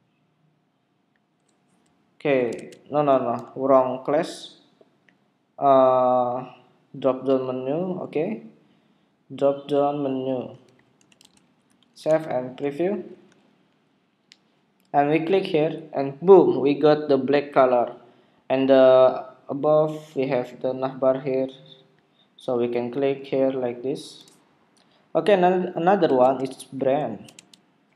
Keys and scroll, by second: 2.5 super+Tab, 11.9 super+s, 12.2 super+Tab, 13.1 super+r, 26.1 super+Tab, 27.4 super+Tab.